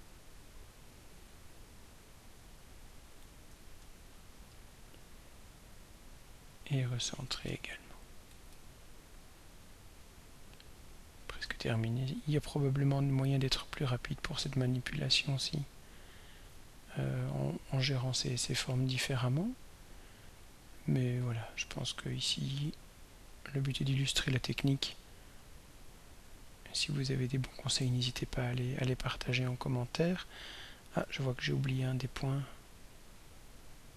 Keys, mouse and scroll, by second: 1.7-2.6 scroll up 1, 4.0-5.0 shift+drag, 6.7-8.4 drag, 8.6-9.3 shift+scroll down 2, 9.8-10.1 scroll up 2, 11.5-13.5 shift+drag, 14.1-16.6 shift+drag, 18.3 click, 19.7 click, 21.3-26.5 drag, 28.5 ctrl+scroll down 2, 29.8 ctrl+scroll down 2, 31.1-31.6 ctrl+scroll down 3, 33.4-33.9 drag.